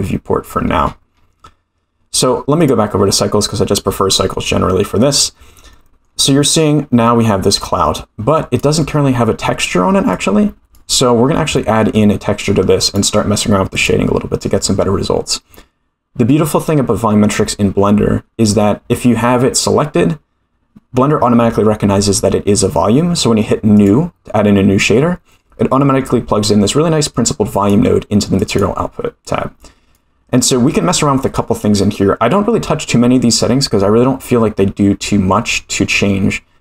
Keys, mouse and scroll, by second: 0.5-1.4 scroll up 15, 2.1-2.7 drag, 4.0-4.3 middle drag, 4.9-5.3 scroll up 2, 5.7-6.0 shift+middle drag, 6.0 shift+scroll up 1, 8.4 click, 10.1 click, 11.1 scroll down 2, 11.5-11.8 shift+middle drag, 12.9-13.9 drag, 23.7 click, 25.0-26.0 scroll up 12, 26.0 middle click, 27.1 click, 28.4 click, 29.6 click, 30.6 click.